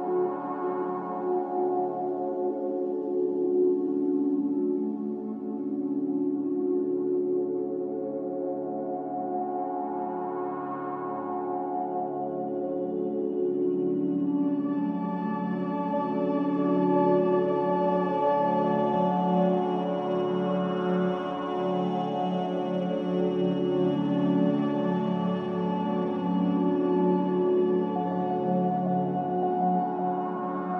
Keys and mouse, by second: 0.3 alt+shift+click, 1.0 middle click, 2.9 alt+shift+click, 6.1 ctrl+b, 12.7-15.3 middle drag, 16.9 Tab, 17.9-18.7 middle drag, 19.7-20.4 shift+middle drag, 21.5-22.0 shift+middle drag, 24.0 Tab, 24.6 Tab, 26.7-28.2 middle drag, 29.1-29.7 shift+middle drag.